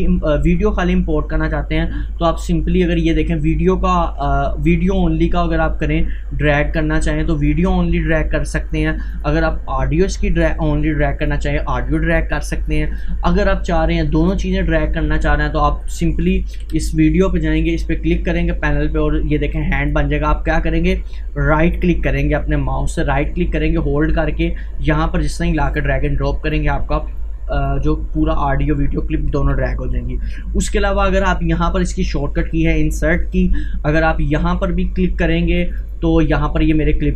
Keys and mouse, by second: 7.5-9.2 drag, 9.2 Delete, 11.2-12.9 drag, 12.9 Delete, 14.3-16.7 drag, 16.7 Delete, 17.7-27.7 drag, 28.0-29.7 drag, 29.7 Delete, 35.5-37.1 drag.